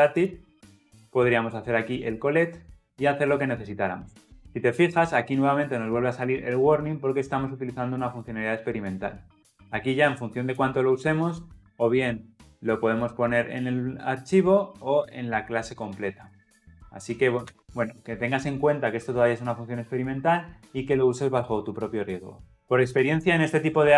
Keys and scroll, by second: 0.9 ctrl+v, 11.3 alt+Return.